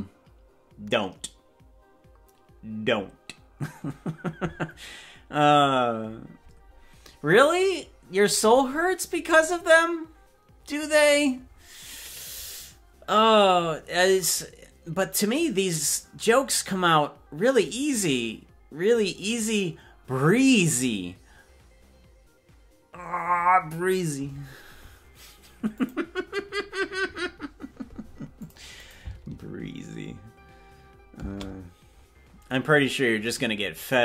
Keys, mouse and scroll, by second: 28.6 click, 29.0 click, 29.5 space, 31.5 space.